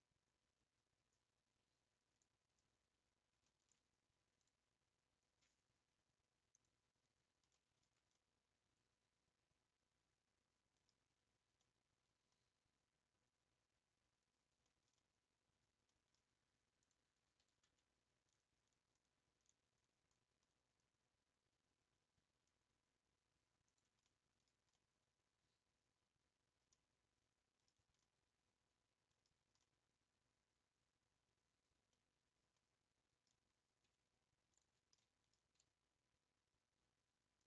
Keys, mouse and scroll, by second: 3.6 ctrl+v, 6.6 click, 7.1 scroll down 2, 7.3 scroll up 1, 7.5 middle click, 7.9 Tab, 8.1-11.2 middle drag, 11.2 Tab, 11.5 scroll up 1, 11.6-16.8 middle drag, 16.8 click, 17.4 s, 17.5 s, 24.0 middle click, 24.5 scroll down 2, 24.7-27.8 middle drag, 27.8 Tab, 28.0-29.2 middle drag, 29.2 scroll down 1, 29.4 Tab, 29.6-33.6 middle drag, 33.6 scroll up 2, 34.5 alt+click, 35.1 middle click, 35.6 s.